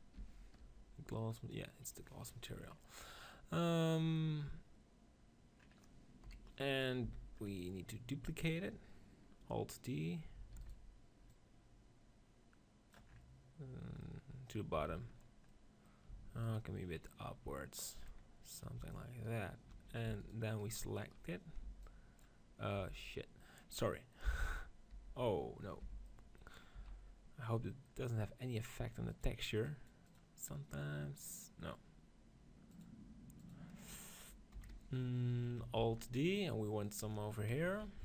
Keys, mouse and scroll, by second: 1.9-3.6 middle drag, 6.1 KP_1, 7.2 z, 10.5 alt+d, 11.2-12.9 drag, 11.2-12.8 right drag, 12.9-14.3 middle drag, 14.6 z, 16.0 z, 16.4-18.2 right drag, 17.0-18.2 drag, 19.2-22.8 right drag, 21.6 v, 21.7-23.5 drag, 22.7 v, 23.9-25.1 middle drag, 24.1 v, 24.9 v, 25.7 b, 26.6 z, 29.0-32.2 drag, 31.1-32.5 middle drag, 32.6-34.4 drag, 34.4 KP_7, 35.7 alt+d, 36.9-38.0 drag.